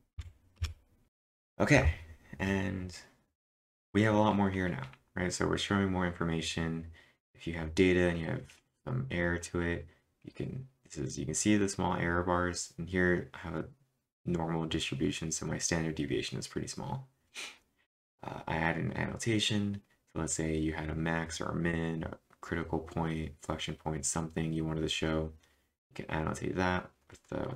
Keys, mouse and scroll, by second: 0.1 Up, 0.6 Return, 1.1 click.